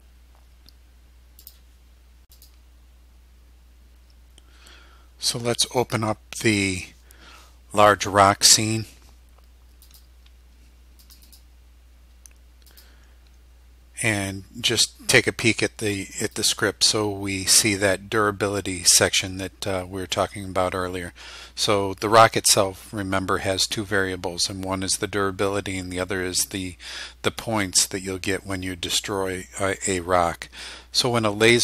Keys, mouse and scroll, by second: 1.5 click, 2.4 click, 5.8 click, 9.9 click, 11.1 click, 12.8 click, 16.4 click.